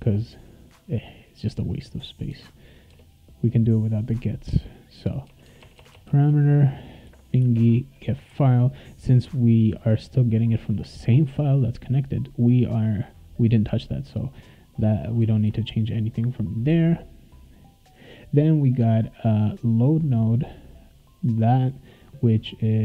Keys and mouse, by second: 0.9-2.2 drag, 2.3 BackSpace, 2.9 BackSpace, 4.3 click, 5.0 click, 5.2-6.1 typing, 7.4 shift+0, 8.3 ctrl+s, 14.4 click, 15.2 BackSpace, 15.4 BackSpace, 22.6-22.8 drag.